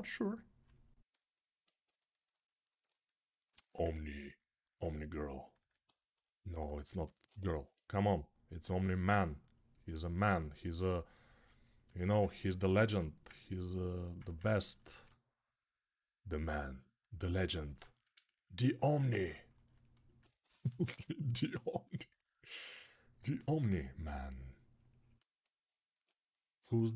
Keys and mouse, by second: 5.4 alt+q, 6.8 g, 12.7 alt+q, 14.7 shift+r, 17.4 ctrl+r, 19.7-24.3 alt+right drag, 20.0 1, 20.8 [, 21.3 [.